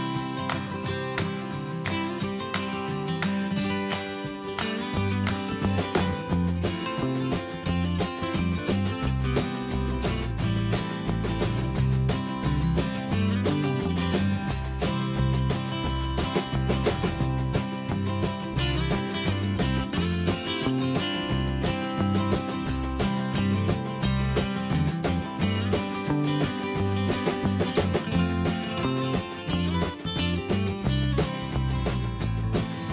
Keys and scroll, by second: 1.8 ctrl+c, 3.5 ctrl+v, 4.4 BackSpace, 5.1 Escape, 12.9 Escape, 16.5 alt+Up.